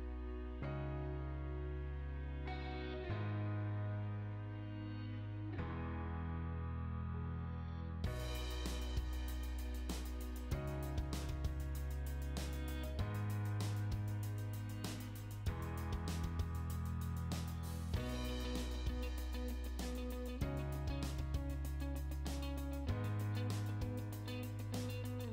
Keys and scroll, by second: 6.0 h, 6.2 space, 19.2 Escape, 23.3 Escape, 24.2 Delete.